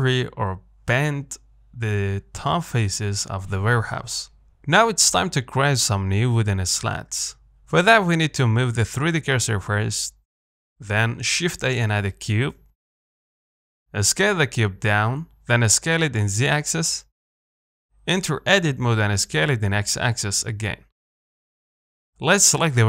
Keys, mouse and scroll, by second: 2.1 ctrl+z, 2.9 g, 4.4 Tab, 4.8 middle click, 5.0-5.4 scroll down 3, 5.4-6.2 scroll up 2, 6.2 middle click, 6.6 scroll up 1, 6.8-10.1 shift+middle drag, 10.1 shift+right click, 13.8 s, 16.4 s, 18.8 Tab, 19.0 middle click, 19.3 s, 21.7 KP_3, 22.6 Tab.